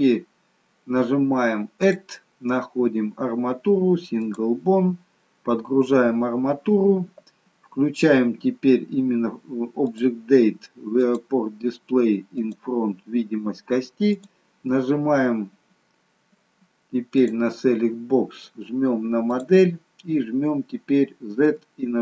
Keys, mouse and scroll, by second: 1.8 click, 9.8 click, 10.9 click, 14.1 click, 17.1 click, 19.2 click, 21.6 z.